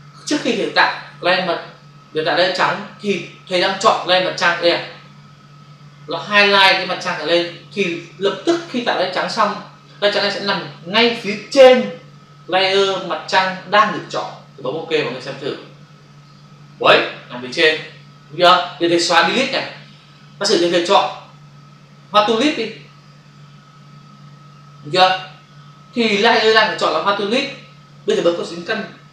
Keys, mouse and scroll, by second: 16.1 click, 19.4 Delete, 22.2 click.